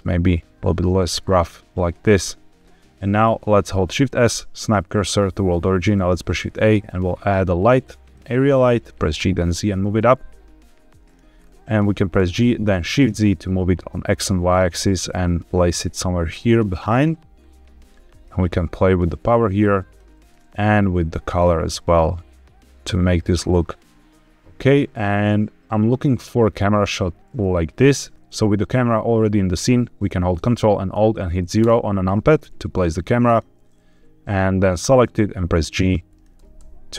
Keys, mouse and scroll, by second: 1.4-2.0 scroll down 1, 2.5-3.1 scroll down 2, 3.8 shift+s, 5.9 shift+a, 8.9 g, 9.1 z, 10.9 click, 11.3-12.1 scroll down 2, 12.1 g, 12.7 shift+z, 16.4-16.7 drag, 16.7-17.3 scroll up 3, 17.3-18.3 scroll down 1, 18.3-20.0 drag, 20.2 click, 24.4 click, 24.4-25.1 scroll up 4, 25.2 middle click, 26.5-27.1 scroll up 1, 27.1 scroll down 1, 27.3-27.9 shift+middle drag, 31.5 ctrl+alt+KP_0, 33.2 click, 33.8 g, 36.0 click, 36.3-36.9 typing.